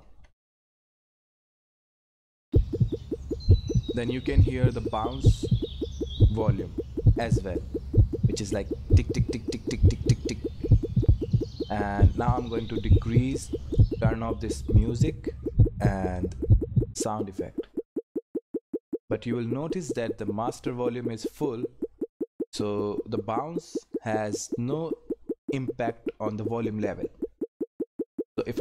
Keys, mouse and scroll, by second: 0.0 ctrl+F10, 14.8 click.